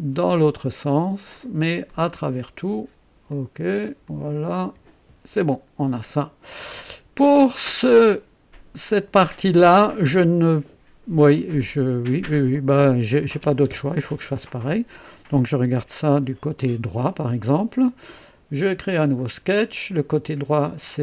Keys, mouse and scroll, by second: 0.1 click, 1.3 click, 1.9 click, 3.2 click, 4.0 click, 4.6 &, 5.4-6.7 drag, 6.8 click, 8.9-9.8 drag, 11.3-15.1 drag, 15.7 KP_3, 18.7 click, 20.7 click.